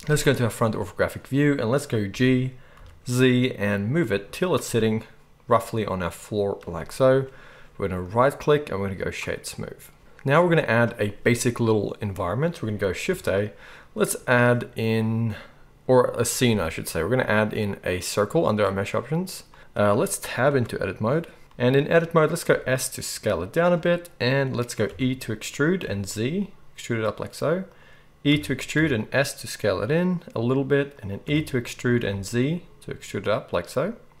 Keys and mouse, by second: 2.1 g, 8.0-34.2 right drag, 13.1 shift+a, 20.5 Tab, 22.5 s, 24.8 e, 28.3 e, 31.2 e.